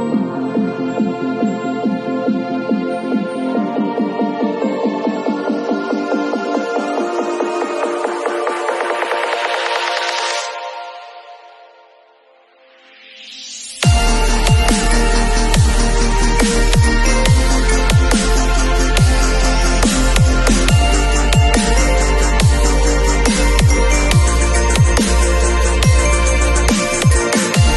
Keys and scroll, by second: 6.0 super+b, 17.0 super+l, 20.9 Return.